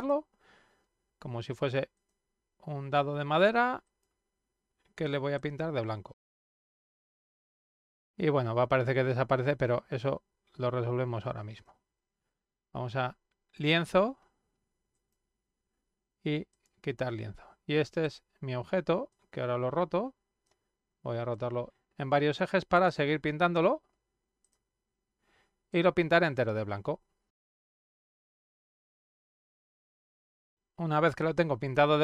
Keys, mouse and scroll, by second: 0.0 click, 1.9 click, 3.8 click, 5.4-11.6 drag, 14.9 click, 16.5 click, 18.0 click, 19.1-20.4 drag, 21.3 click, 22.6 click, 24.4 click, 25.7-28.1 drag, 28.2 click, 28.6-30.9 drag, 31.1 click.